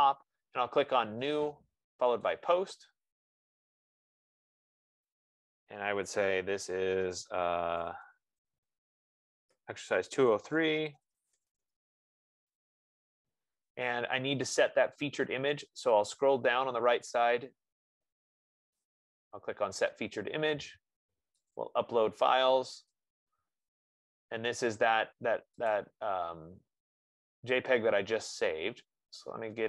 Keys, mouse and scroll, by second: 2.4 middle click, 2.6-10.7 drag, 7.8-13.5 typing, 11.4 click, 11.6 click, 16.1 middle click, 16.1-17.4 scroll, 16.5 F15, 16.5 middle click, 19.1 click, 21.9 click.